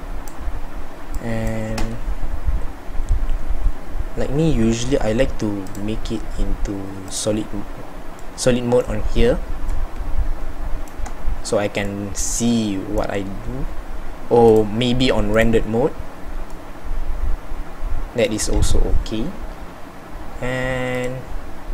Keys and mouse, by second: 21.0-21.7 middle drag.